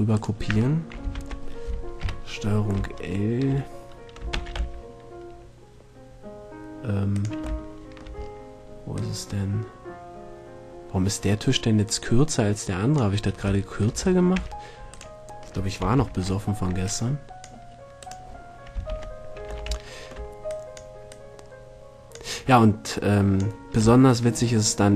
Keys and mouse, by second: 0.3 middle click, 1.3 ctrl+l, 2.2 KP_7, 4.5 shift+d, 8.3 shift+middle click, 9.0-10.9 shift+drag, 13.8 middle click, 14.5 a, 16.3 ctrl+l, 18.9 right click, 19.1 ctrl+l, 19.9 middle click, 20.7 click.